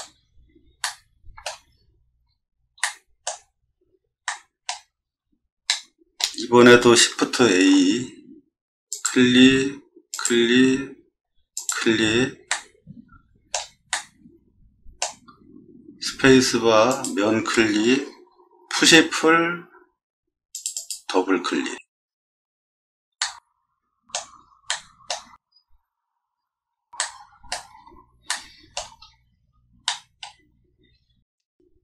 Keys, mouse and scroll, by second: 0.1 middle click, 0.1 middle click, 0.2 middle click, 0.8 shift+middle click, 1.7 scroll down 2, 2.2 scroll down 2, 2.8 shift+middle click, 3.7 middle click, 3.8 middle click, 4.2 middle click, 4.9 middle click, 5.0 middle click, 5.4 middle click, 5.7 middle click, 7.5 shift+a, 8.9 click, 10.1 click, 11.5 click, 12.5-13.5 middle drag, 13.9-15.0 middle drag, 16.0 space, 16.9 click, 18.7 p, 20.5 click, 20.7 click, 23.2 middle click, 24.7 middle click, 25.4 shift+middle click, 25.5 shift+middle click, 26.3 middle click, 26.4 middle click, 26.4 middle click, 27.0 shift+middle click, 27.7 scroll up 1, 28.3 shift+middle click, 29.2 scroll up 2, 29.3 middle click, 29.8 middle click, 30.5 middle click, 30.5 scroll up 2, 30.6 middle click, 31.7 middle click, 31.7 scroll up 2.